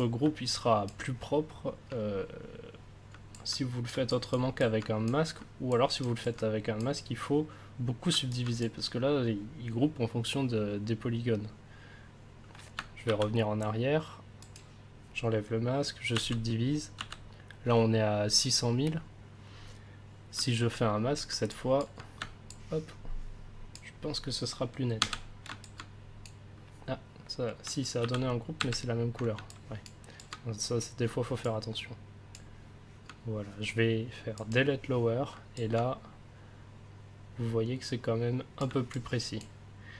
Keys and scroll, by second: 13.0 ctrl+z, 16.1 ctrl+d, 25.0 ctrl+w, 28.0 ctrl+z, 28.6 ctrl+w.